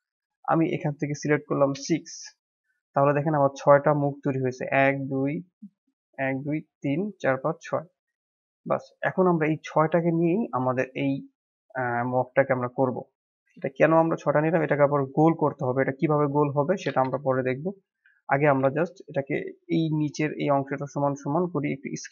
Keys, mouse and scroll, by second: 11.9 middle click, 12.4 click, 13.4 KP_1, 14.5 click, 14.9-17.0 middle drag, 17.0 KP_1, 18.3 g.